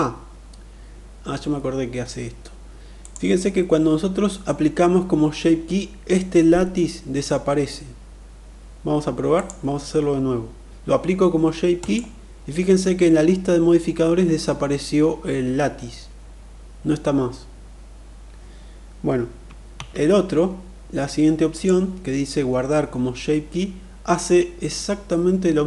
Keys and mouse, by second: 2.7-5.4 drag, 9.0-11.6 drag, 19.3 ctrl+z, 21.1-25.6 drag.